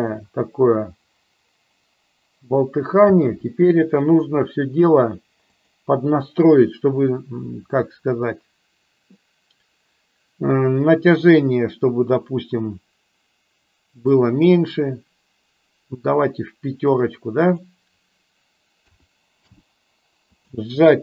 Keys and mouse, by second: 3.2 space, 5.6 click, 14.0-16.9 drag, 17.3-19.6 drag, 20.4-21.0 drag.